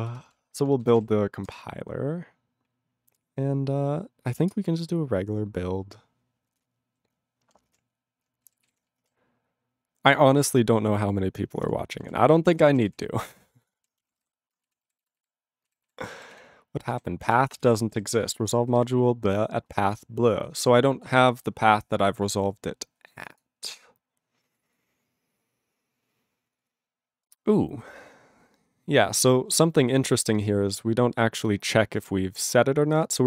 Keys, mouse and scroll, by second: 7.9 ctrl+s, 8.7 ctrl+s, 11.8 ctrl+s, 12.0 ctrl+e, 12.5 ctrl+e, 12.6 ctrl+p, 12.7 ctrl+e, 12.9 ctrl+p, 12.9 ctrl+e, 13.8 ctrl+s, 13.8-14.8 typing, 14.9 ctrl+s, 15.1 ctrl+s, 15.3 ctrl+s, 15.7 ctrl+s, 16.2 s, 16.4 s, 17.0 s, 17.3 s, 17.6 Return, 18.0 alt+b, 18.1 alt+b, 18.3 alt+b, 18.4 alt+b, 18.7 alt+f, 18.8 alt+f, 19.6 alt+f, 19.7 alt+f, 20.4 alt+b, 21.9-23.3 scroll, 23.3 click, 23.3 click, 23.4 click, 23.4 click, 24.6 click, 24.6 click, 24.7 click, 24.8 click, 25.2 scroll up 1, 25.3-25.9 scroll, 26.5 click, 26.6 click, 26.6 click, 26.7 double click, 27.3 click, 27.4 click, 27.5 scroll up 1, 27.6-28.1 scroll, 30.0 scroll, 30.3 click, 30.3 click, 30.4 click, 30.4 click, 31.0 click, 31.4 click, 31.5 click, 31.7-32.3 scroll down 1, 32.3 scroll, 32.4 click, 32.5 click, 33.0 click, 33.0 click, 33.1 click, 33.1 double click.